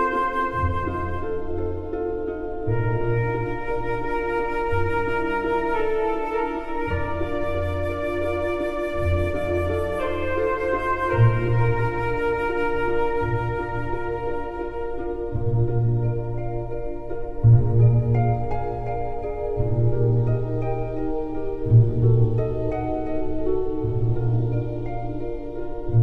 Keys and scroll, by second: 20.1 ctrl+=, 21.5 space.